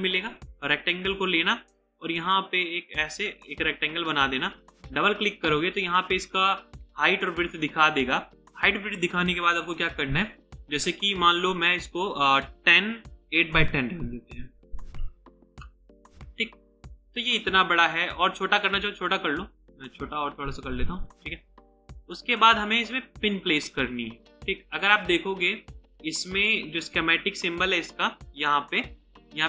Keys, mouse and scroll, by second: 3.4 right click, 4.9 double click, 12.3 double click, 13.1 Return, 13.5 typing, 14.8-15.2 typing, 15.4 Return, 16.6 double click.